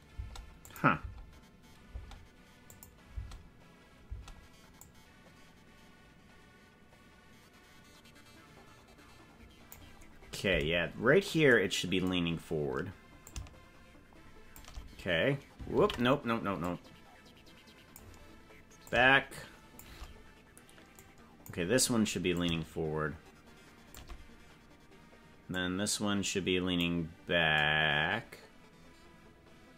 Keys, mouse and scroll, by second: 0.0 space, 0.6 click, 1.0 space, 2.0 space, 2.7 click, 3.1 space, 4.2 space, 4.8 click, 13.2-14.5 shift+drag, 14.8 scroll up 2, 15.8 ctrl+z, 16.6-17.9 drag, 18.8 shift+click, 21.0 click, 22.4-24.0 shift+drag, 25.5-26.7 drag.